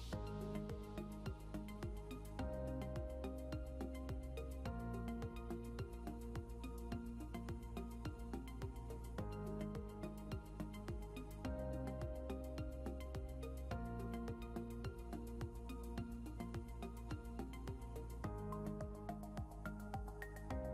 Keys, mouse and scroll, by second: 1.1 scroll up 1, 2.0 scroll down 1, 3.7 scroll up 1, 4.7 scroll up 1, 5.8 scroll down 1.